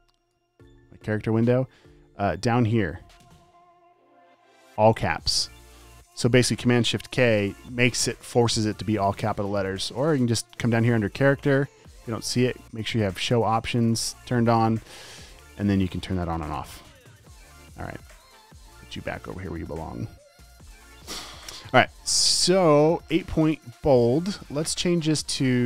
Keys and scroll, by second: 7.5 shift+super+k.